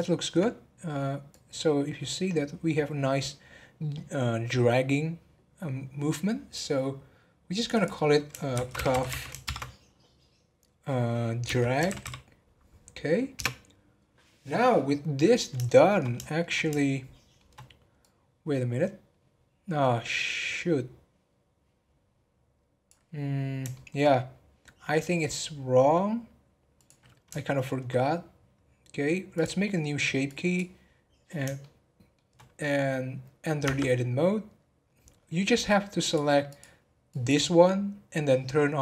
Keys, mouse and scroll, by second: 1.3-4.4 drag, 7.6 click, 7.7-9.0 drag, 9.0 f, 15.0-15.6 scroll down 1, 15.6-18.0 shift+middle drag, 18.0-21.1 drag, 23.7-26.7 shift+middle drag, 26.7 click, 27.3-29.3 shift+middle drag, 29.3-31.6 drag, 31.6-33.6 shift+middle drag, 33.6 Tab, 36.0 click.